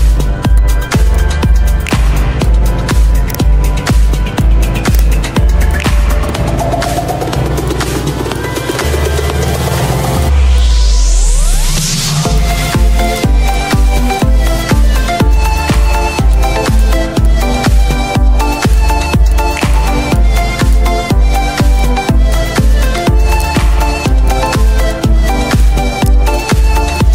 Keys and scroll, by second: 3.8 z, 7.5 z, 14.5 Down, 26.6 z.